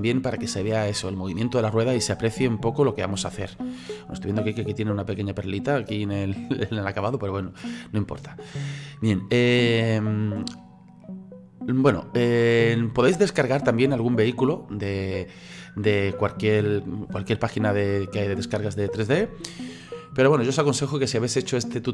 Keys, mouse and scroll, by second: 8.9 scroll down 2, 11.0-14.1 middle drag, 15.2-15.6 scroll down 1, 15.6-18.7 middle drag, 19.9-21.9 middle drag.